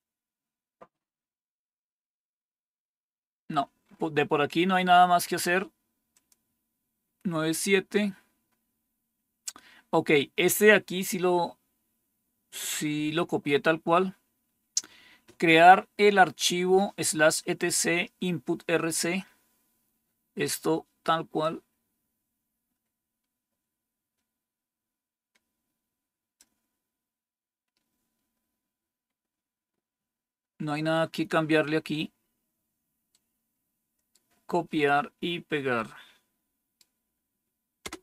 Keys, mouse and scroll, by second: 0.6-2.7 scroll down 1, 2.7-3.8 scroll down 1, 3.8-4.5 scroll up 1, 4.5-6.0 scroll up 1, 6.0 click, 9.8-11.7 scroll down 2, 11.7 scroll down 1, 12.3-13.3 scroll down 2, 13.3-15.2 scroll down 1, 15.2-21.3 scroll down 1, 21.3-26.3 drag, 33.0-34.0 right drag, 35.6-36.7 right drag, 37.7 Return.